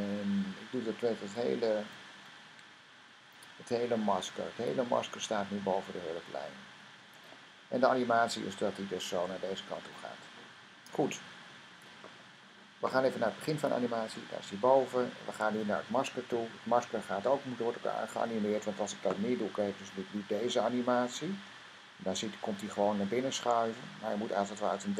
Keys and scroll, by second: 0.2 Up, 0.8 Up, 4.5 Down.